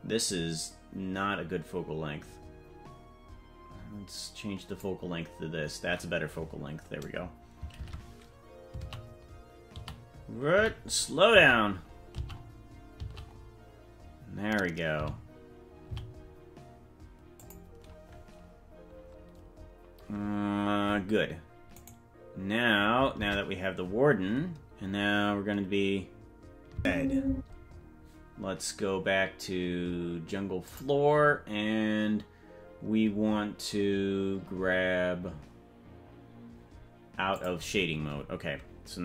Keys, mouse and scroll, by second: 7.9 shift+`, 21.9 right click, 23.4 ctrl+Tab, 26.8 space, 27.6 space, 30.8 click, 37.3 click.